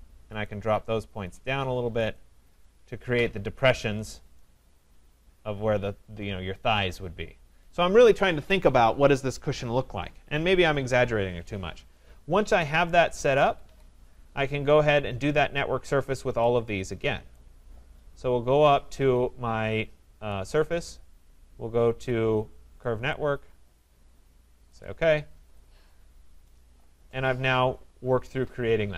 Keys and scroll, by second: 13.2 Escape.